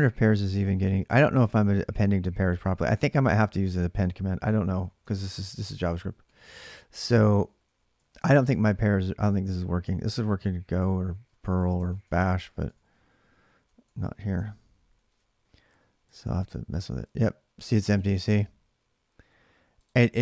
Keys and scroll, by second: 0.0-1.4 typing, 4.6-8.5 typing, 11.4 ctrl+[, 11.6 typing, 11.8 Return, 12.4 alt+Tab, 14.7 ctrl+r, 16.5-17.3 typing, 20.0 alt+Tab.